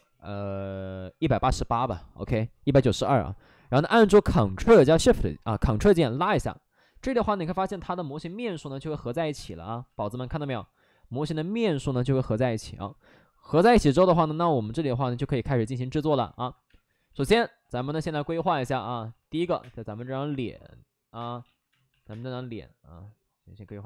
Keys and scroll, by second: 1.1 1, 1.6 8, 1.6 8, 1.8 Return, 3.5 alt+s, 7.0 alt+s, 8.0 shift+e, 9.2 shift+f, 9.5 shift+f, 10.3 shift+f, 11.0 shift+f, 12.6 alt+s, 12.6 alt+d, 16.6 space, 17.8-19.8 typing, 18.1 alt+s, 19.1 alt+s, 21.1 space, 21.4 ctrl+z, 21.8 alt+s, 22.0 space, 23.6 alt+s.